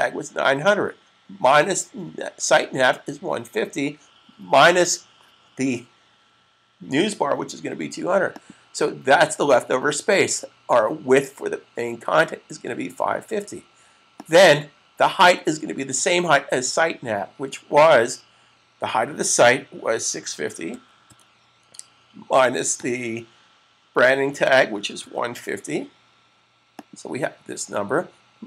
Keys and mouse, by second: 8.1 click, 13.9 click, 20.0-21.0 typing, 22.5 typing, 24.2-25.6 typing, 26.5 click.